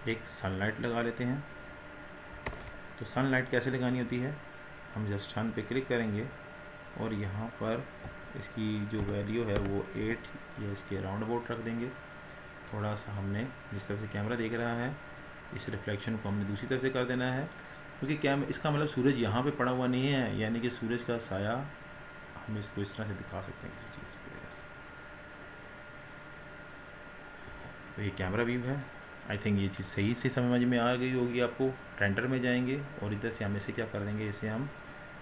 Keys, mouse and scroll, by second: 2.8 ctrl+z, 5.5 click, 10.1-11.6 drag, 11.6 scroll down 1, 12.1-13.0 middle drag, 13.0-15.4 scroll down 10, 15.4-16.7 middle drag, 16.7 scroll up 3, 20.6 click, 25.0-27.6 middle drag, 27.6 KP_0.